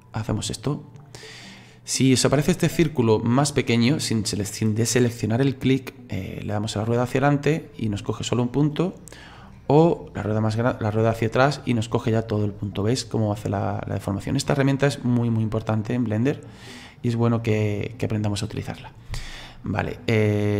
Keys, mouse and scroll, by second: 19.9 click.